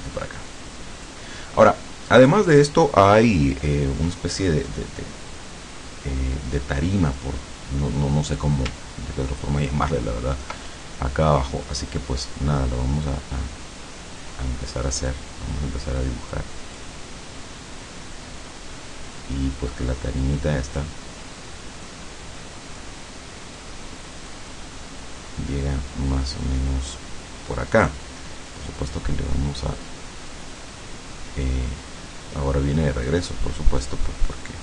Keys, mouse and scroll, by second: 2.2 click, 8.3 click, 9.2-9.5 ctrl+scroll up 2, 9.7 ctrl+click, 16.4 click, 20.3 click, 21.9-23.1 drag, 23.7 click, 27.7 click, 33.1 click.